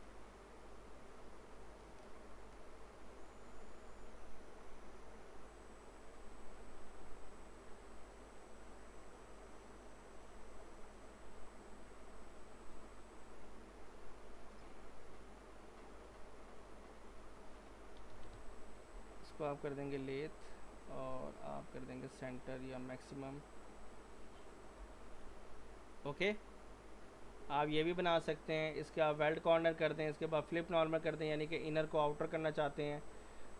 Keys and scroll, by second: 18.0-18.3 typing, 24.8 typing.